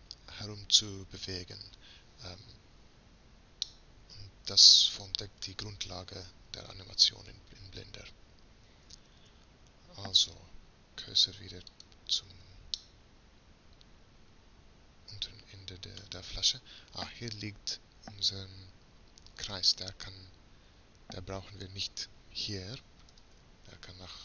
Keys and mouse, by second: 3.7-5.9 middle drag, 9.1 shift+s, 12.8-20.5 middle drag, 20.5 right click, 23.1 m.